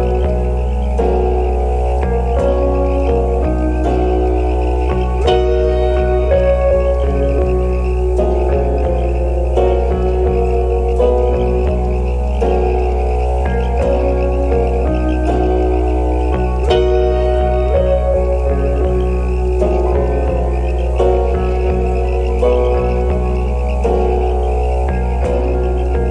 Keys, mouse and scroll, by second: 1.2-1.9 scroll up 1, 2.0 alt+click, 2.6 scroll up 1, 2.8 alt+click, 5.9-6.5 scroll down 1, 6.7 ctrl+z, 6.7 scroll down 1, 6.9 alt+click, 7.3 alt+middle click, 7.8 ctrl+s, 10.2 scroll down 1, 11.3 right click, 13.3 typing, 14.1 alt+click, 15.4 alt+scroll up 2, 15.6 alt+click, 16.4 alt+scroll down 1, 17.3-18.1 alt+scroll down 3, 17.5 alt+middle click, 17.6 alt+click, 18.1-19.5 scroll up 3, 18.4 alt+click, 18.8 alt+middle click, 20.7 right click, 22.9-23.3 scroll down 1.